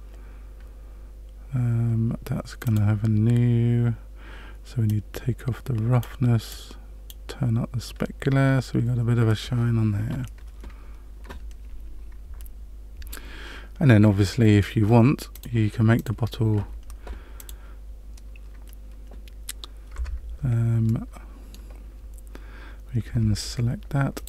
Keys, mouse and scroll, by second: 2.6 click, 4.8 click, 6.5 click, 15.3 click, 15.9 click, 17.3 click, 20.0 Tab, 20.8 middle click, 23.1 Tab, 24.1 shift+click.